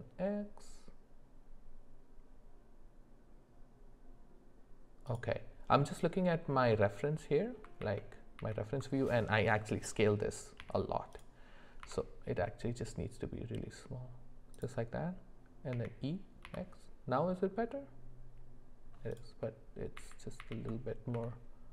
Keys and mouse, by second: 7.8 ctrl+z, 8.4 ctrl+z, 10.6 g, 11.8 s, 15.7 e, 20.0 ctrl+z, 20.4 ctrl+z, 21.1 s.